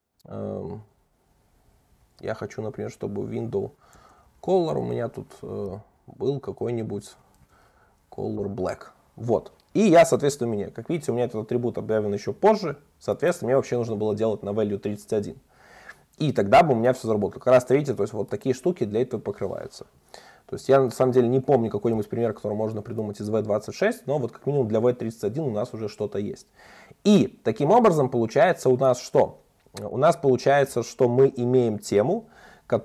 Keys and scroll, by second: 5.7 Return, 19.2 alt+Up, 21.9 Return, 26.6 super+s, 29.1 super+1.